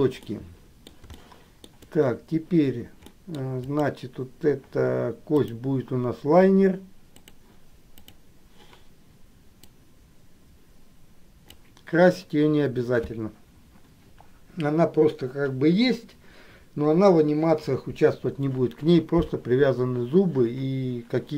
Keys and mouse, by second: 0.5 middle click, 1.3 shift+middle click, 3.3 middle click, 3.7 click, 5.4-7.5 drag, 9.9-11.6 drag.